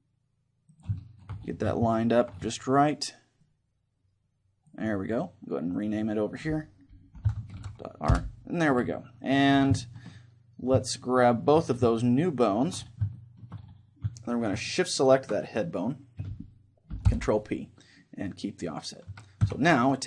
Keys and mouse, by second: 0.8-2.5 drag, 1.1-3.7 middle drag, 3.4-5.1 drag, 5.7-8.1 drag, 9.8-12.7 middle drag, 12.3-14.0 right drag, 13.1-15.0 middle drag, 15.0-16.9 right drag, 17.6 ctrl+p, 19.1 a, 19.5 Tab.